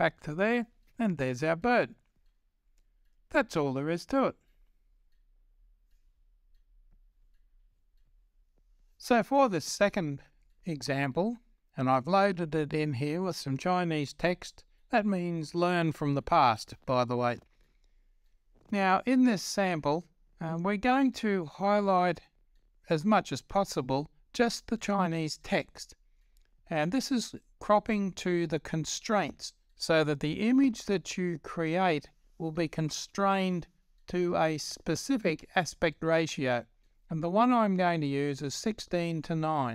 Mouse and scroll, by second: 0.0-7.6 drag, 7.7 click, 9.2-39.7 drag.